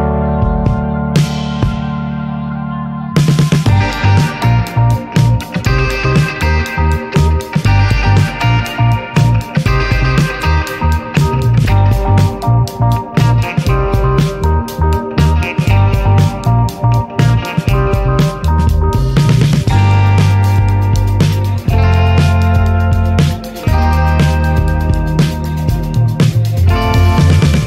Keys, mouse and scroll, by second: 0.7-3.7 drag, 4.2-4.7 middle drag, 4.7 shift+d, 5.4-6.0 middle drag, 6.4-6.9 drag, 6.9-7.6 middle drag, 7.6 click, 10.1 click, 10.8 click, 11.3 scroll down 4, 11.6-14.0 middle drag, 14.0-14.9 drag, 15.6-16.7 shift+middle drag, 16.7 click, 17.6-18.4 middle drag, 18.4 click, 20.1-20.7 middle drag, 20.7 s, 21.9 click, 23.5 click, 24.3-26.4 middle drag, 26.4-26.9 drag.